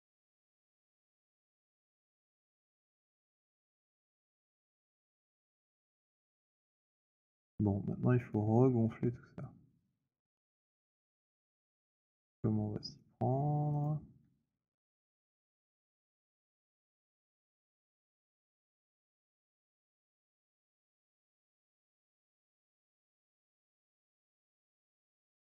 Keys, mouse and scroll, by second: 1.7 shift+right click, 4.2 shift+right click, 4.6 shift+right click, 6.2 w, 6.6 shift+click, 8.0 alt+click, 9.0 alt+middle click, 10.3 alt+click, 10.7 alt+middle click, 11.2 alt+right click, 13.0 right click, 13.6 click, 16.1 click, 16.7 click, 17.6 alt+click, 18.0 z, 21.0 click, 22.9 click, 23.7 click, 24.4 w.